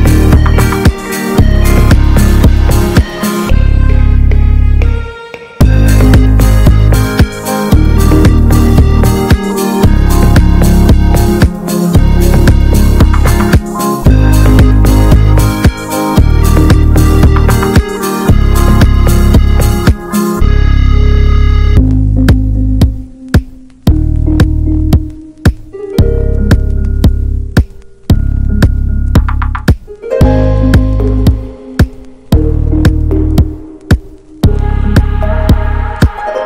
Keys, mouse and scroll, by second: 0.7-1.6 scroll down 1, 1.6-2.9 middle drag, 3.1 alt+middle click, 3.7-4.0 scroll up 2, 5.6 click, 6.4 scroll down 2, 7.3 alt+middle click, 8.1 scroll up 2, 9.1 scroll down 1, 9.7 scroll up 1, 12.3-13.9 drag, 13.9 scroll down 1, 14.2-15.5 middle drag, 16.5 middle click, 16.8 scroll down 1, 17.1-21.7 middle drag, 21.7-25.5 drag, 25.5 middle click, 26.0-28.4 drag, 28.8-32.9 drag, 32.9-36.4 middle drag.